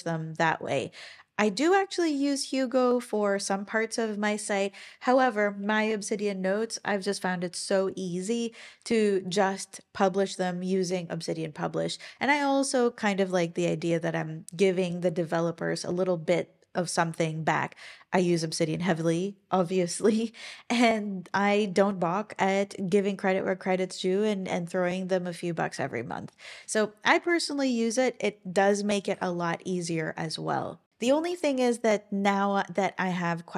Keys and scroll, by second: 29.1 Escape.